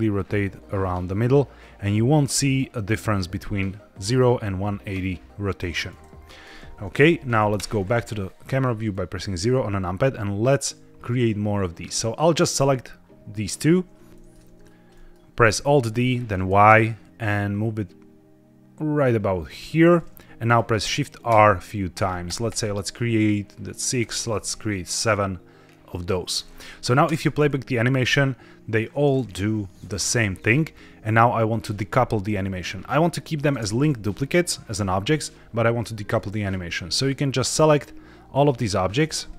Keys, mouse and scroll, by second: 7.5 KP_0, 8.8 shift+middle click, 11.1-12.5 drag, 14.1 shift+middle drag, 14.1 click, 14.4-14.8 scroll down 2, 14.8-15.2 middle drag, 15.4 alt+d, 15.8 y, 17.5 t, 20.3 click, 21.2 shift+r, 21.8 shift+r, 22.2 shift+r, 22.4 shift+r, 23.9 shift+r, 27.0 space, 33.4 space, 36.0 middle click, 36.3 scroll down 1, 37.0 click, 38.2-38.9 scroll up 3, 38.9 scroll down 1, 39.2-39.3 shift+middle drag.